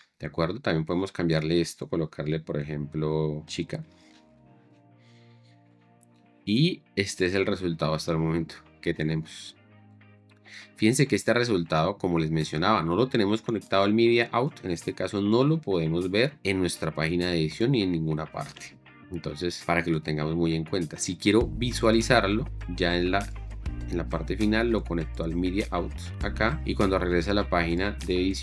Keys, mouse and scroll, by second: 1.2 F2, 3.5 v, 3.9 BackSpace, 4.1 c, 4.5 Return, 16.2 shift+4, 19.1 shift+5, 26.7 shift+4, 28.1 space.